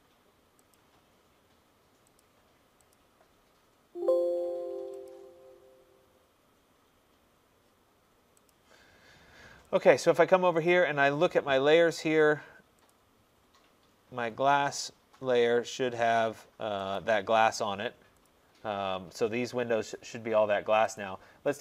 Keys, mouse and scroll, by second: 0.8 click, 2.2 click, 3.0 click, 5.1 click, 8.6 click, 9.9 click, 10.8 click, 13.0 click, 17.0 click, 18.3 click, 21.1 click.